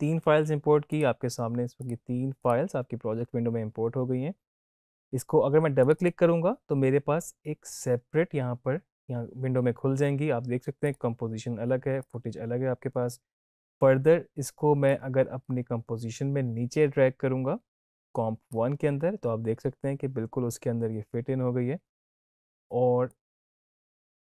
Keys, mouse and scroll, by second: 5.7 click, 10.8 click, 14.8-18.6 drag.